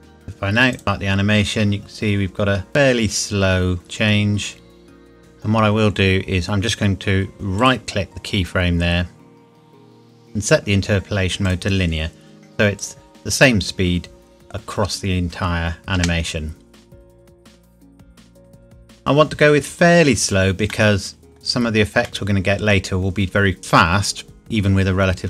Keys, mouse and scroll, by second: 0.8 click, 3.8 click, 7.6 right click, 7.8 right click, 11.4 click, 16.0 space, 20.7 middle click.